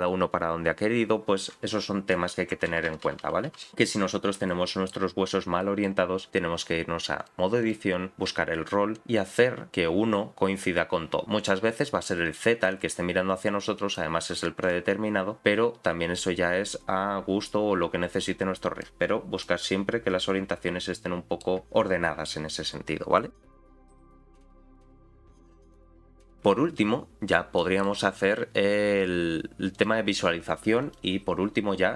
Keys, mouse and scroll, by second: 4.5 middle click, 5.3-5.8 scroll up 2, 5.6 middle click, 7.2 click, 8.9-11.2 drag, 11.5 middle click, 12.7-13.9 drag, 14.6 click, 15.4-18.8 drag, 19.1-19.6 scroll down 3, 19.4-21.4 middle drag, 27.6 middle click, 29.7-30.9 drag.